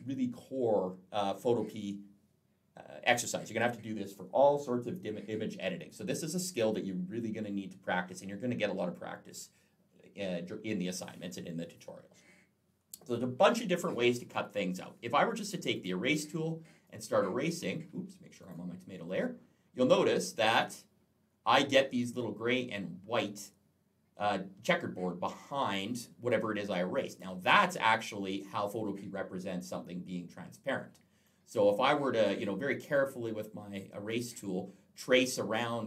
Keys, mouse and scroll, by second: 15.6 click, 16.7 click, 18.2 click, 18.9 click, 31.1 click.